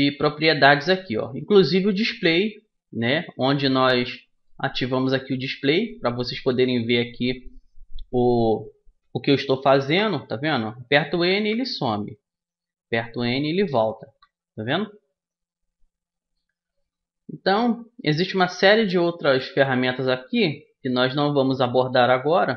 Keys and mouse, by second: 3.6-5.4 drag, 10.0 n, 11.3 n, 13.0 n, 14.2 n, 17.4-19.4 middle drag, 20.4-22.2 drag.